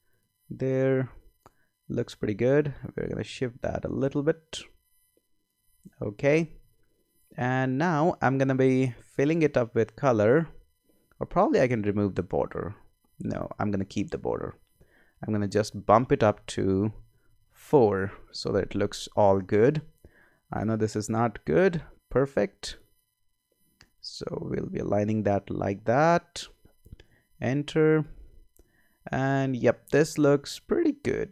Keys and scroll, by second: 16.9 Up, 26.9 Return.